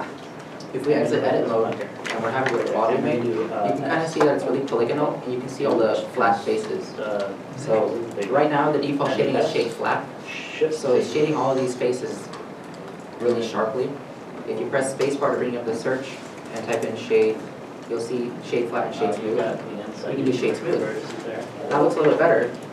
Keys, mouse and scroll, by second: 0.7 shift+middle click, 0.9 scroll up 1, 2.0 middle click, 2.9 middle click, 3.5 scroll down 1, 4.0-4.6 scroll up 1, 6.9 middle click, 7.5-7.9 scroll down 1, 15.1 shift+middle click, 15.1 space, 17.1 s, 17.3 h, 17.5 e, 18.3 Down, 19.0 Down, 19.2 Up, 20.5 Return, 21.4 shift+middle click, 22.4-22.7 scroll down 1.